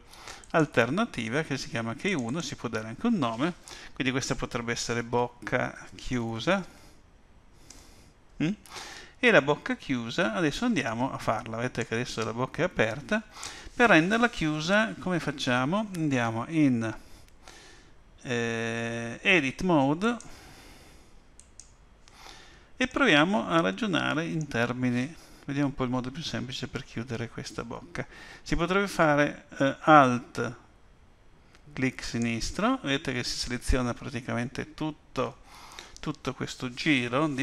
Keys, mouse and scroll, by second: 0.4 click, 2.0 click, 2.3 click, 5.5 c, 10.8 click, 20.0 click, 22.9 middle click, 32.0 alt+click.